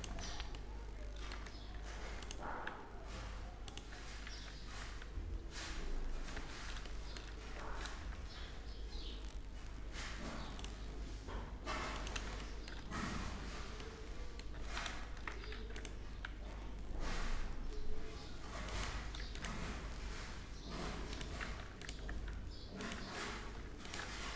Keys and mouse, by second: 1.4 ctrl+r, 1.9 ctrl+r, 3.9 ctrl+r, 7.4 ctrl+r, 12.0 middle click, 12.6 middle click, 12.8 Tab, 15.2 Tab, 15.2 ctrl+r, 18.8 ctrl+r, 21.4 ctrl+r, 23.0 ctrl+r.